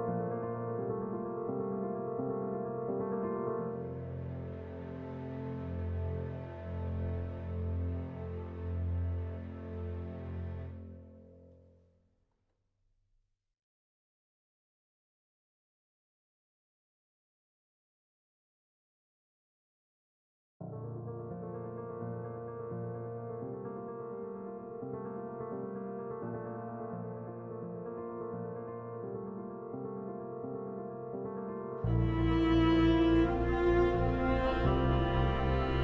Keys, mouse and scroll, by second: 2.3-26.1 drag, 29.8 Escape, 30.7-32.0 drag, 32.0 g, 32.9 shift+click, 33.6 c, 34.1 Escape, 34.6 F4.